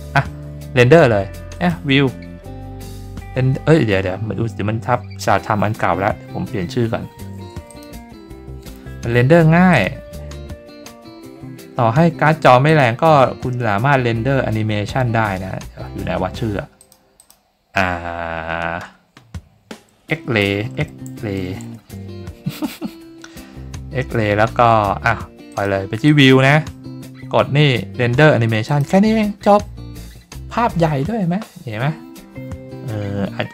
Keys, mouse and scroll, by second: 1.5 click, 7.7 click, 9.7 click, 12.6 click, 16.8 click, 17.1 click, 25.5 click, 26.0 click, 28.6 click.